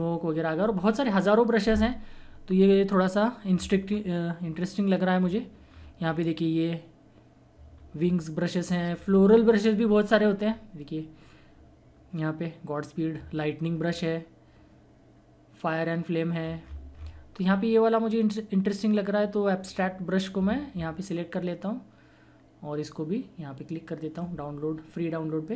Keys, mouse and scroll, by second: 3.8 scroll down 1, 3.8 typing, 5.2 scroll up 1, 5.7 scroll down 1, 5.7-6.0 typing, 7.7 scroll down 1, 7.9-10.0 typing, 8.9 scroll down 1, 12.2 typing, 13.8 scroll down 1, 13.8 typing, 16.5-17.1 scroll up 2, 19.7 click, 24.1 click.